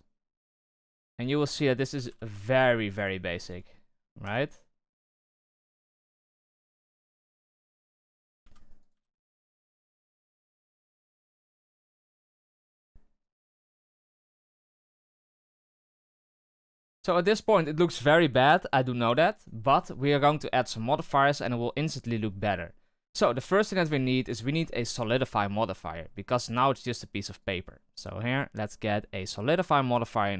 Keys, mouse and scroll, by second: 1.1 alt+right click, 1.9 g, 3.3 alt+right click, 4.2 r, 5.1 e, 6.9 r, 8.0 alt+right click, 8.4 s, 9.8 alt+right click, 10.2 s, 11.6 alt+right click, 12.0 s, 13.4 r, 13.9 g, 14.7 alt+right click, 14.9 s, 16.9 Tab, 22.6 scroll down 1, 22.8-23.7 middle drag, 23.7 scroll down 2, 23.9-24.3 shift+middle drag, 24.3-24.8 scroll up 7, 24.8-27.4 shift+middle drag, 27.4-30.3 drag.